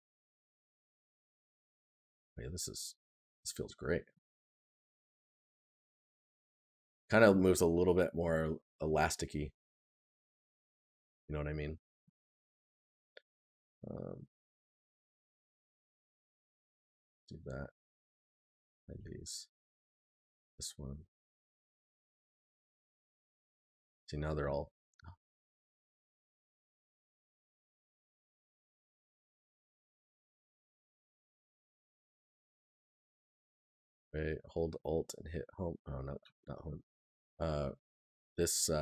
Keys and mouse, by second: 3.4 right click, 8.1 right click, 29.4 c.